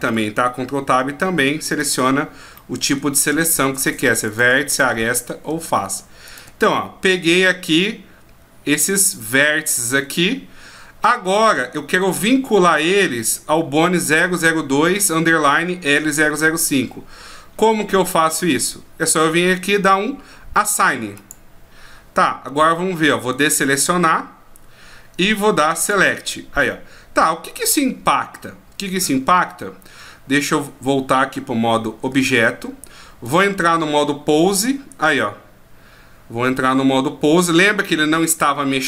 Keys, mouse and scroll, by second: 2.5 middle click, 4.3 shift+right click, 4.8 middle click, 6.3 shift+right click, 6.7 middle click, 9.8 middle click, 21.2 click, 23.3 a, 25.8 click, 32.1 Tab, 33.2 right click, 34.4 r.